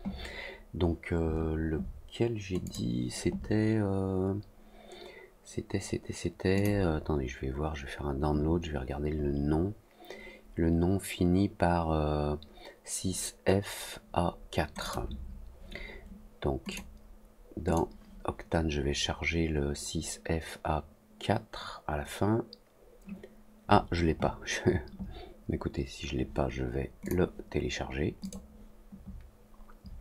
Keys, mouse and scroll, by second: 2.6 click, 6.5 click, 14.8 click, 16.6 click, 17.6 click, 27.0 click, 28.2 click.